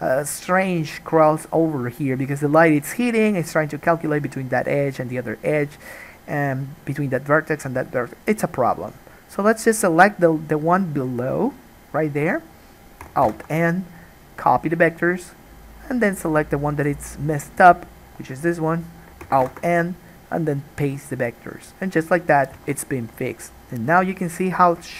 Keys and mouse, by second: 9.7 click, 9.8-16.3 middle drag, 13.4 alt+n, 16.3 click, 16.7-24.9 middle drag, 19.6 alt+n, 22.7 alt+a.